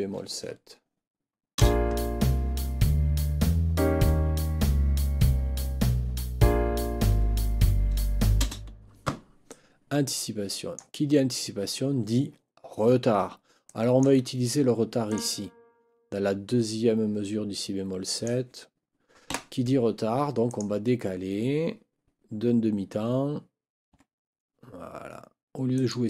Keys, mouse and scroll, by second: 1.5 space, 8.4 space, 9.5-10.9 drag, 13.7 click, 15.1 click, 18.1 click, 19.3 Delete, 20.5 click, 23.9 4, 25.7 click.